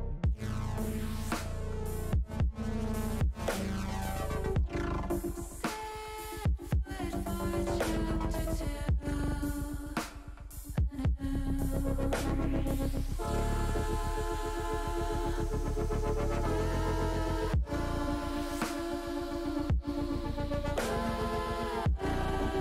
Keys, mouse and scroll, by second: 1.0 ctrl+z, 2.1 ctrl+z, 3.7 click, 5.0 middle click, 6.5 click, 7.7 Tab, 11.0 shift+middle click, 11.9-15.5 middle drag, 18.3 shift+e, 19.7 shift+a, 22.4-22.6 drag.